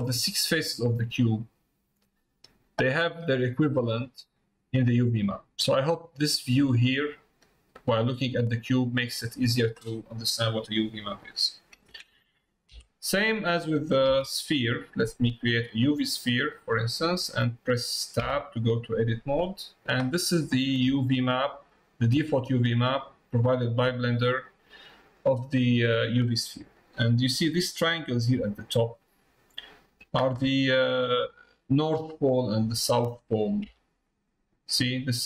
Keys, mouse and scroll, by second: 0.1 click, 0.5 middle click, 2.3 middle click, 3.0 middle click, 3.6 click, 7.0 middle click, 8.0 middle click, 9.0 middle click, 10.3 middle click, 16.5 middle click, 20.6 middle click, 22.7 click, 23.9 scroll down 1, 24.0 middle click, 25.1 scroll down 1, 28.5 middle click, 29.4 click, 30.5 middle click, 31.7 middle click.